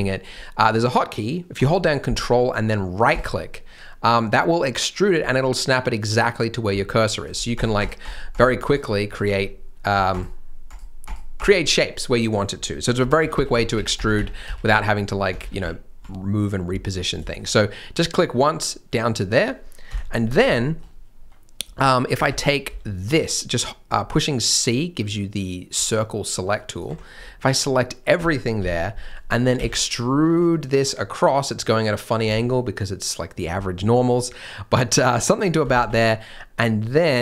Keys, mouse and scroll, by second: 3.0 ctrl+right click, 7.2 ctrl+right click, 9.3-9.7 scroll down 1, 9.7 scroll up 1, 10.1 ctrl+right click, 13.0 ctrl+z, 14.3 ctrl+z, 14.9 scroll down 1, 15.1 scroll up 1, 15.3 ctrl+z, 16.0 ctrl+z, 16.8-17.1 scroll up 1, 17.2 shift+m, 18.1 scroll down 1, 18.6 middle click, 20.5 shift+middle click, 22.2 alt+a, 22.6 c, 27.2 scroll down 1, 27.3 middle click, 29.5 e, 35.6 g.